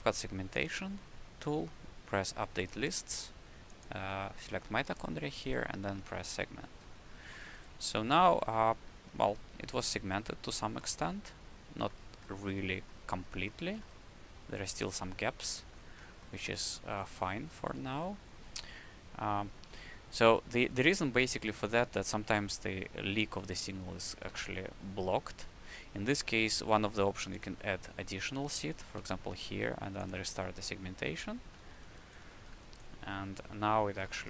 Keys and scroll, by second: 24.0 w, 25.4 w, 29.0 a, 29.9 a, 31.4 q.